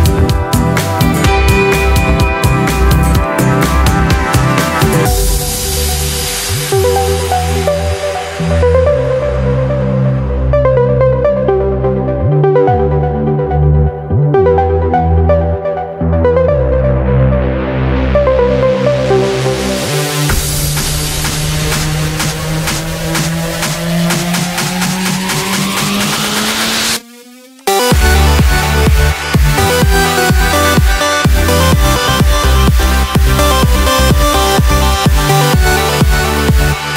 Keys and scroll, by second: 13.9 ctrl+t, 21.0 ctrl+=, 21.5 ctrl+=, 21.9 ctrl+=.